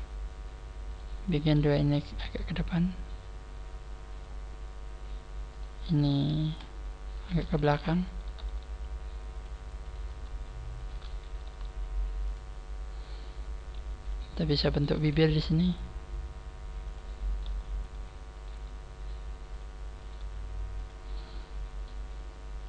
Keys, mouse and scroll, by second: 0.9 right click, 1.2 shift+right click, 2.1 click, 5.5 right click, 7.1 shift+right click, 7.9 scroll up 3, 8.3 g, 9.3 click, 9.8 right click, 10.8 shift+right click, 11.5 g, 12.3 click, 12.7 scroll down 2, 13.4-14.1 scroll down 1, 14.1 click, 14.1 right click, 14.1 scroll down 1, 14.7 shift+right click, 15.3 g, 17.3 click, 17.3 right click, 17.9 click, 17.9 g, 18.3 right click, 18.5 g, 19.5 click, 19.9 right click, 20.2 g, 20.8 click, 21.8 scroll up 3, 22.6 right click, 22.6 scroll up 1.